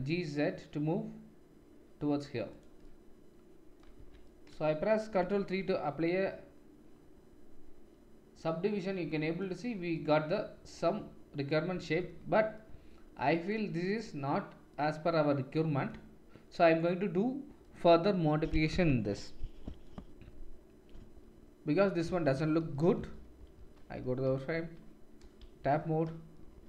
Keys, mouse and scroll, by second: 3.9 Tab, 5.4 ctrl+3, 17.6 click, 22.6 KP_7, 23.5 shift+z, 24.2-25.5 shift+middle drag, 24.5 shift+z, 25.5 Tab.